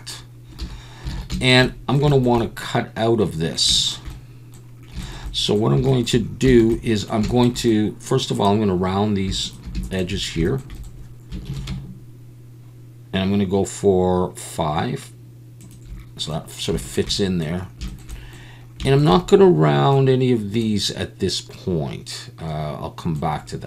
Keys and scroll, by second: 0.6 a, 1.2 alt+a, 11.5 ctrl+b.